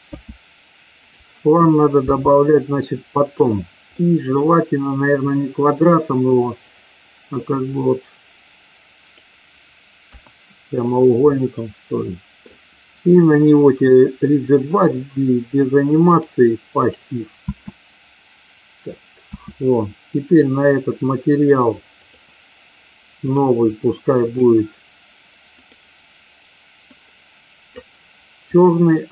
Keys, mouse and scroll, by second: 0.1 s, 1.1 click, 1.9 s, 4.0 middle click, 7.7-9.2 drag, 10.1 KP_1, 11.2-12.4 middle drag, 16.0 click, 17.5 space, 20.2 click, 22.0 click, 23.5 click, 24.2 click, 28.5 click.